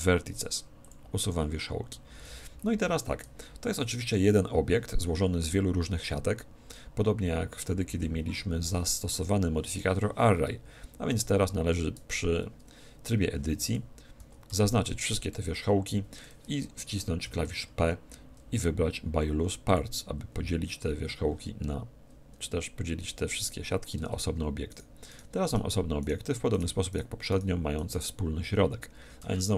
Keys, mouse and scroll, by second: 2.2 a, 5.5-7.4 middle drag, 12.0 Tab, 13.6 Tab, 14.2 a, 14.5 a, 15.4 z, 17.2 p, 24.0 Tab, 24.6-29.5 right drag, 29.2 a.